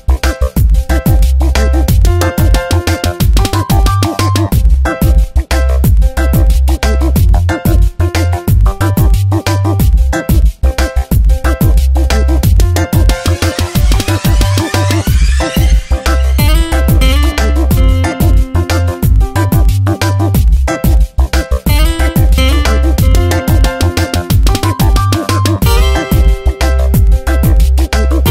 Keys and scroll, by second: 1.1 space, 4.1 space, 18.4 space, 20.7 space, 24.9 space, 26.6 ctrl+z, 28.0 space.